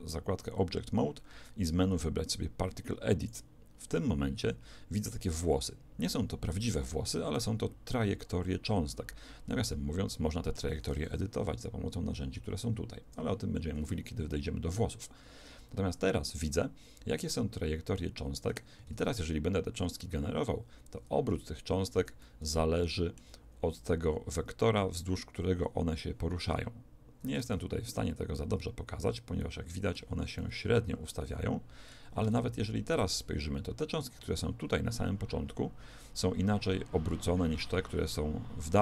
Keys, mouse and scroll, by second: 4.6-7.4 drag, 7.4-9.6 middle drag, 11.2 t, 13.1 t, 14.3-16.6 middle drag, 18.9 alt+a, 22.0 Escape, 22.2-24.2 middle drag, 27.5 alt+a, 29.4-32.2 middle drag, 32.2 alt+a.